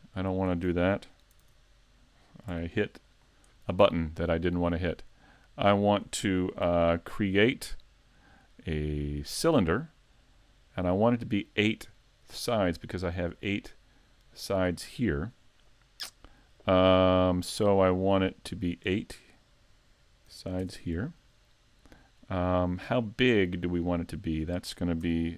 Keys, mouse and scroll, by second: 1.4 super+z, 2.5 x, 6.7 Tab, 8.2 click, 10.7 click, 18.7 click, 22.0 scroll up 2, 22.6 middle click, 24.0 middle click, 25.1 Tab.